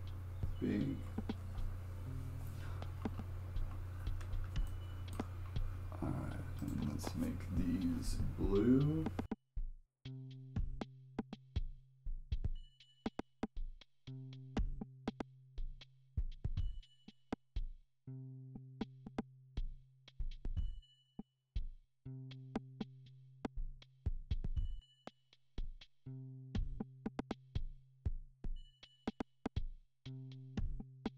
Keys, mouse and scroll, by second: 3.1-3.6 scroll down 2, 3.6-4.1 scroll up 2, 4.7 shift+middle click, 5.3-6.6 scroll up 1, 6.6-9.4 drag, 9.6 click, 9.9 middle click, 10.0 KP_1, 10.2 ctrl+z, 10.2 scroll up 2, 10.3 shift+middle click, 10.6 click, 10.9 click, 11.5 click, 11.8 click, 12.0 click, 12.3 click, 12.4 ctrl+z, 12.5 click, 13.0 click, 13.3 scroll down 6, 13.4 shift+middle click, 13.5 click, 13.8 click, 14.0 ctrl+z, 14.1 ctrl+z, 14.2 click, 14.6 click, 15.2 shift+middle click, 15.2 scroll up 1, 15.4 shift+middle click, 15.4 click, 15.6 scroll down 3, 15.7 shift+middle click, 16.0 click, 16.9 click, 17.2 click, 17.5 click, 18.0 click, 18.5 click, 18.7 click, 19.2 click, 19.6 shift+middle click, 19.8 click, 20.2 click, 20.9 click, 21.5 click, 21.9 scroll down 7, 22.2 ctrl+z, 22.5 click, 22.7 click, 23.6 click, 23.9 click, 24.5 click, 24.7 click, 25.3 click, 25.5 click, 25.7 click, 26.2 click, 26.9 click, 27.7 click, 28.5 click, 29.9 click, 30.7 click, 30.9 click.